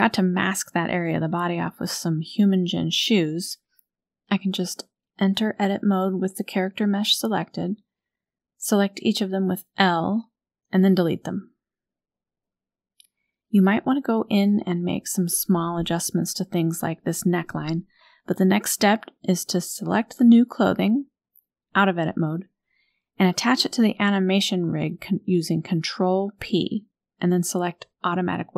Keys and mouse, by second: 2.3-2.7 middle drag, 3.8 Tab, 4.3 shift+click, 5.2 a, 5.3 a, 6.3 l, 6.7 middle click, 7.4 middle click, 8.4 l, 9.0 click, 10.4 Delete, 12.8 KP_1, 13.7 Tab, 14.5 shift+drag, 15.4 shift+drag, 17.2 click, 25.6 ctrl+click.